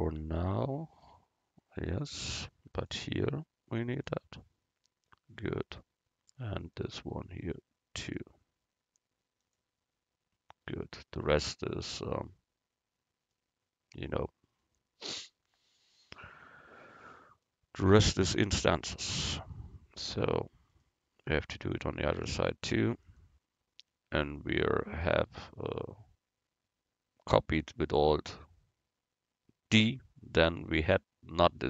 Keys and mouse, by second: 0.3-4.8 drag, 6.7-8.1 middle drag, 8.1-10.0 drag, 8.1-9.6 right drag, 10.8 middle click, 13.4 middle click, 15.8 middle click, 20.8-23.4 right drag, 21.7-23.4 drag, 24.4-27.1 right drag, 27.1-30.9 middle drag, 31.5-31.6 drag.